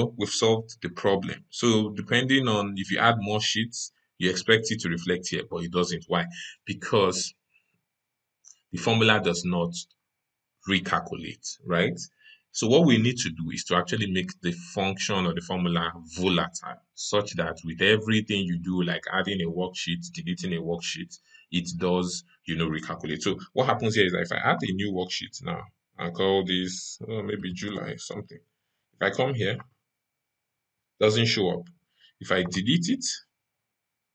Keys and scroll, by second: 1.1 ctrl+shift+Right.